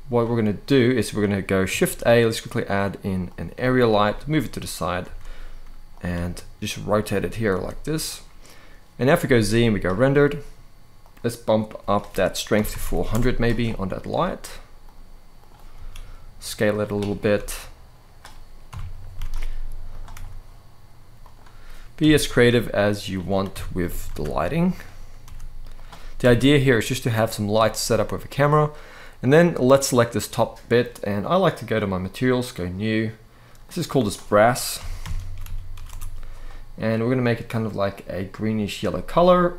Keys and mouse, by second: 1.5 shift+a, 3.7 g, 4.4 click, 4.7 r, 5.8 g, 6.7 click, 7.2 r, 8.9 z, 11.7-12.8 drag, 12.5 0, 14.5-15.2 drag, 15.4 s, 16.4 click, 18.4 KP_7, 18.9 shift+d, 19.6 click, 19.8 r, 20.9 click, 21.7 KP_0, 23.2 KP_7, 23.8 shift+d, 24.4 click, 24.9 r, 25.4 click, 25.9 KP_0, 28.9 click, 31.4 click, 32.2 click, 33.4 click, 33.7-35.6 drag, 35.4 s, 36.7 click.